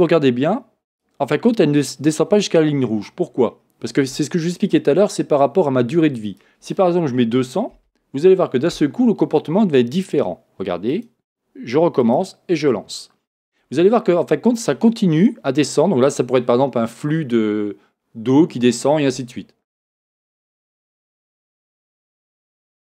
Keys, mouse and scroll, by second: 1.1 click, 6.2-20.1 drag, 8.8 Return, 21.7-22.8 drag.